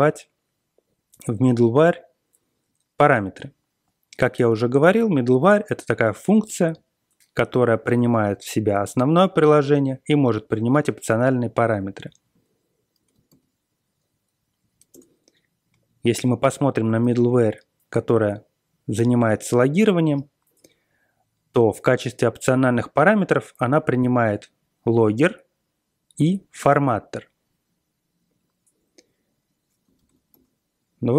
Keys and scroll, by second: 12.9 ctrl+x, 13.2 b, 14.6 Page_Down, 14.9 Return, 17.0 ctrl+l, 17.5-18.0 Page_Up, 29.9 ctrl+x.